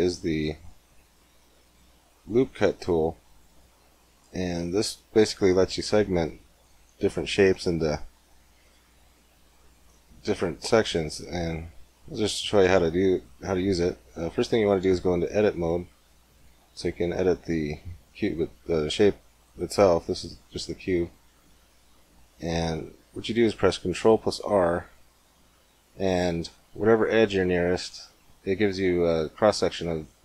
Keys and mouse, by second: 12.5-14.4 middle drag, 15.6 Tab, 19.6-20.9 drag, 20.9 ctrl+r.